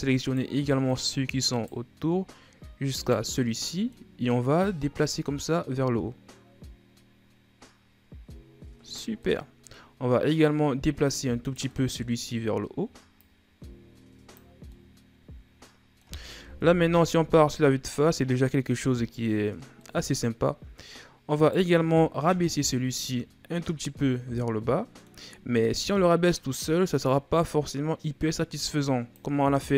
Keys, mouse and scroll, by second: 0.1 shift+right click, 0.7 shift+right click, 1.3 shift+right click, 2.8 shift+right click, 3.2-4.4 middle drag, 4.4-7.4 drag, 9.0-11.2 middle drag, 11.2 right click, 11.5-13.0 middle drag, 13.0-14.4 drag, 14.4 scroll down 1, 14.5-16.4 middle drag, 16.4 KP_1, 17.9-18.7 scroll down 4, 18.7-19.3 scroll up 5, 19.6-21.2 middle drag, 21.2 right click, 22.1 KP_1, 23.3-25.6 middle drag, 25.6 scroll down 1, 25.8-26.9 middle drag, 26.9-29.5 drag, 29.5-29.7 middle drag.